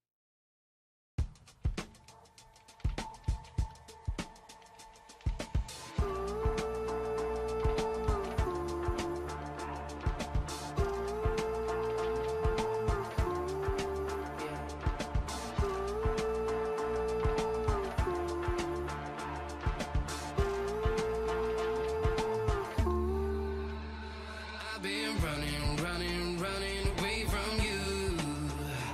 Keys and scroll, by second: 3.4 i, 10.0 i, 20.9 i.